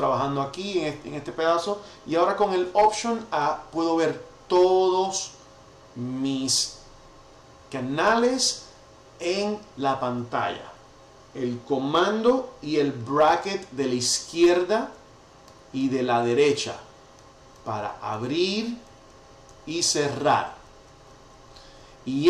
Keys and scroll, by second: 3.1 alt+a, 14.1 super+[, 15.4 super+], 19.4 super+[.